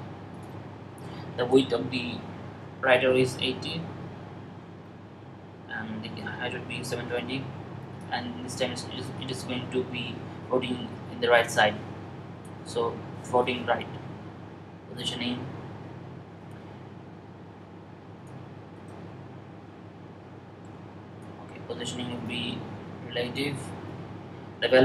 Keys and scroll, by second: 2.3-2.7 typing, 8.1-8.8 typing.